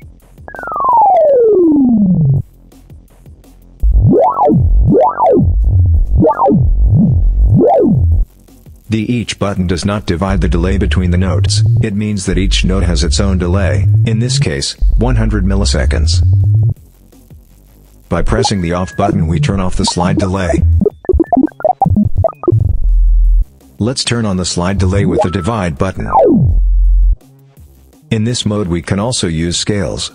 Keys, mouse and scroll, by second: 0.2-2.3 drag, 3.0 click, 3.6-8.2 drag, 9.5 click, 10.0-11.8 drag, 12.1-14.4 drag, 14.6-16.7 drag, 17.4 click, 18.0-23.4 drag, 23.9 click, 24.5-25.5 drag, 25.7-27.1 drag, 29.4 click.